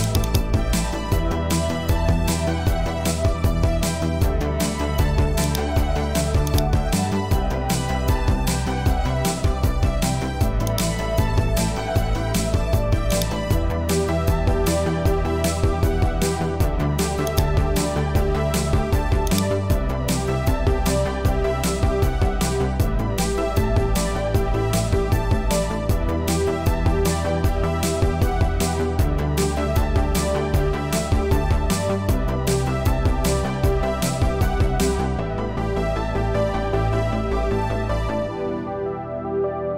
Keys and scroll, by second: 14.3 Return.